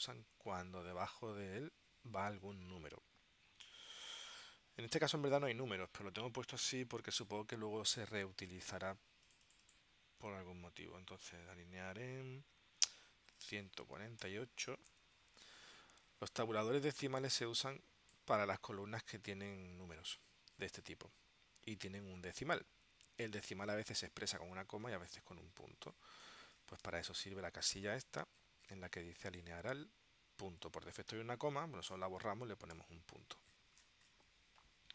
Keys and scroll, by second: 13.5-14.9 typing, 15.1 Tab, 32.0 BackSpace, 32.9 •.